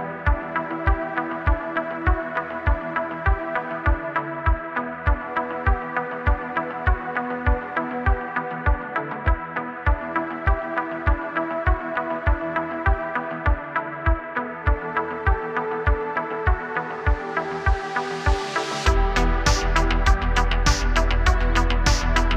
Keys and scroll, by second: 2.2 BackSpace, 2.3 space, 3.9 super+z, 4.4-7.0 typing, 8.7-12.8 typing, 17.3 BackSpace, 19.2 space, 19.9 space.